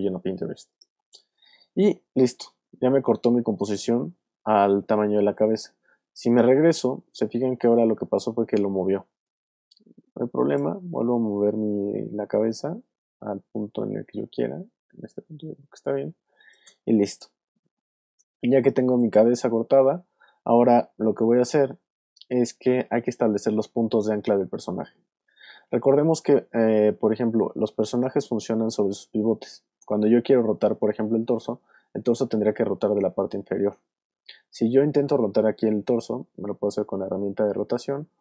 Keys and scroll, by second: 16.1 alt+space, 18.2 alt+space, 18.7 space, 27.2 alt+space, 28.1 space.